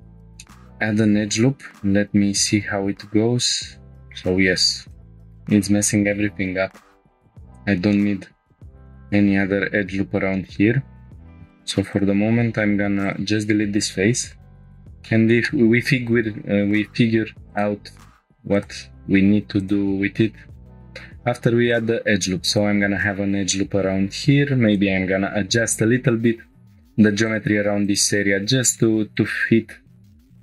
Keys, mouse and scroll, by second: 0.4 shift+middle click, 0.9 scroll up 1, 1.8 ctrl+r, 5.0 shift+middle click, 7.1 middle click, 7.4 scroll up 1, 7.9 middle click, 8.4 scroll up 3, 8.6 shift+middle click, 8.9 middle click, 9.3 scroll up 1, 10.0 scroll down 2, 10.3 shift+middle click, 10.7 scroll down 1, 11.0 middle click, 11.2 click, 11.3 2, 11.5-12.9 drag, 12.9 3, 13.1-14.2 drag, 14.2 Delete, 15.0 shift+middle click, 15.4 middle click, 17.5-19.3 drag, 20.9 ctrl+r, 22.5 click, 24.3 1, 24.7 click, 25.6 g, 25.7 g, 27.2-28.3 drag, 28.3 g, 28.5 g, 29.1 click.